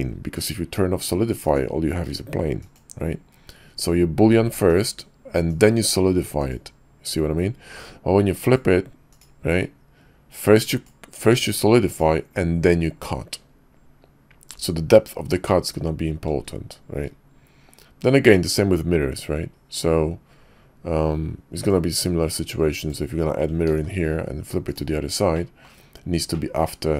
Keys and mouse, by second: 1.4 click, 2.6 click, 4.7 click, 6.3 click, 8.5 click, 9.1 click, 10.7 click, 11.9 click, 21.5 click, 22.9 click, 23.7 alt+x, 24.6 click, 25.3-25.6 drag, 26.3-26.7 drag, 26.7-26.9 middle drag.